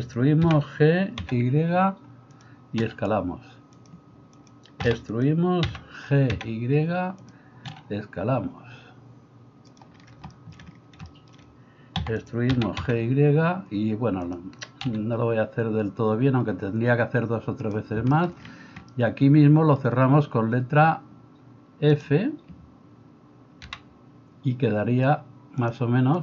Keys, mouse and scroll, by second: 0.4 g, 2.8 s, 4.4 click, 4.9-25.7 middle drag, 4.9 e, 5.6 g, 7.7 s, 12.1 e, 12.6 g, 14.9 s, 23.7 f, 25.7-26.2 drag.